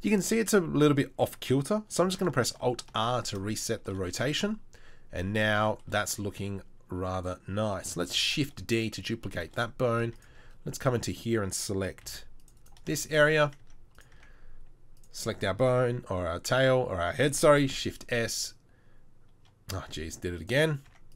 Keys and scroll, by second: 2.9 alt+r, 8.2 shift+d, 10.1 shift+d, 10.1 Tab, 10.4 Tab, 12.1 Tab, 12.1 c, 13.7 Tab, 14.2 Tab, 17.7 shift+s, 20.9 Tab.